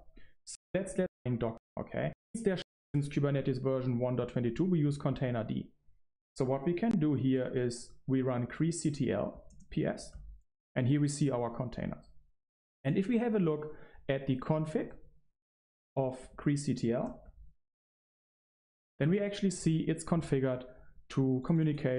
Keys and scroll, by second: 2.5 Right, 2.6 Right.